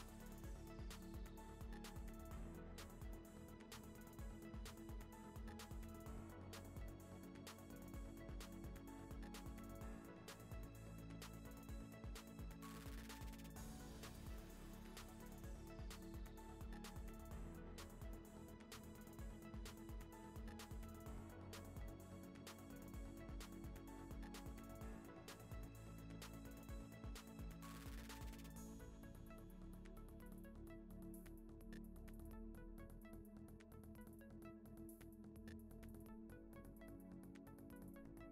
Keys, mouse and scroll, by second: 0.0-0.1 typing, 0.4 middle click, 0.6 ctrl+r, 1.7 ctrl+r, 2.1 shift+middle click, 2.3 scroll up 2, 2.6 click, 2.7 shift+click, 2.8 ctrl+b, 3.1 1, 3.2 click, 3.3 g, 3.7 click, 4.0 ctrl+b, 4.4 click, 4.5 ctrl+b, 4.9 2, 5.0 click, 5.1 shift+click, 5.3 ctrl+b, 5.8 1, 5.8 click, 5.9 g, 6.2 click, 6.2 g, 7.6 click, 7.7 ctrl+b, 8.1 click, 8.2 g, 8.6 click, 8.8 ctrl+b, 9.4 1, 9.5 click, 9.6 g, 10.0 click, 10.1 g, 10.3 click, 10.4 ctrl+b, 11.2 click, 11.3 ctrl+b, 11.8 ctrl+t, 12.2 click, 12.4 g, 12.8 scroll down 2, 13.0 Tab, 13.1 scroll up 1, 13.2 ctrl+s, 13.4 shift+click, 13.7 ctrl+l, 14.2 click, 14.3 click, 14.3-14.7 right drag, 14.7 click, 14.8 click, 14.9 click, 15.5 ctrl+s, 15.9 scroll down 1, 16.1 scroll up 5, 16.2 click, 16.5 1, 16.6 click, 16.7 g, 17.1 ctrl+z, 17.2 click, 17.4 g, 17.7 Tab, 17.8 scroll down 1, 18.0 Tab, 18.2 click, 18.3 click, 18.4 g, 18.7 Tab, 19.0 ctrl+s, 19.3 scroll up 2, 19.4-19.9 shift+middle drag, 19.9 shift+right click, 20.0 shift+a, 20.7 Tab, 20.8 s, 21.1 s, 22.6 KP_Divide, 22.8 scroll down 2, 23.0 click, 23.2 ctrl+b, 23.6 click, 23.6 g, 23.9 click, 24.0 ctrl+b, 24.3 click, 24.4 ctrl+b, 24.6 click, 24.8 g, 25.2 click, 25.2 g, 25.8 click, 25.9 ctrl+b, 26.2 click, 26.3 ctrl+b, 26.7 middle click, 27.1 2, 27.1 click, 27.2 middle click, 27.3 ctrl+b, 27.7 1, 27.8 click, 27.9 g, 28.1 click, 28.2 g, 28.4 middle click, 29.2 KP_Divide, 29.5 Tab, 30.3 shift+click, 30.5 ctrl+l, 30.8 click, 31.0 scroll up 3, 31.1-31.4 shift+middle drag, 31.8 click, 32.5 shift+click, 33.8 click, 34.0 click, 34.4 scroll down 1, 34.6 click, 34.7 scroll up 2, 35.1 shift+middle click, 36.0 shift+middle click, 36.3 click, 36.5 shift+middle click, 37.1 click.